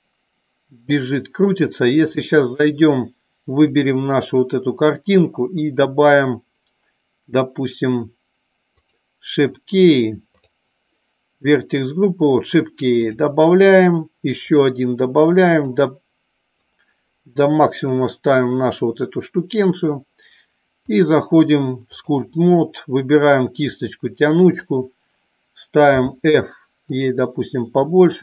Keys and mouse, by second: 2.1 click, 8.8 click, 9.9 click, 13.0 click, 14.5 click, 15.8 click, 20.9 click, 24.7 click.